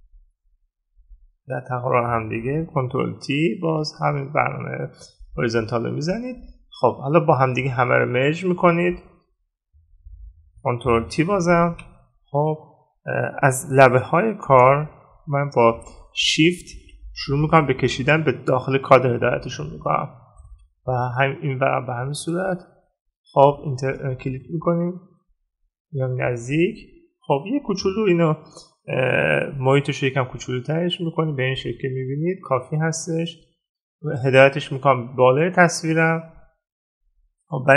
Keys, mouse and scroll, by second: 3.1 right click, 8.2 right click, 14.3 ctrl+-, 24.5 ctrl+-, 25.2 ctrl++.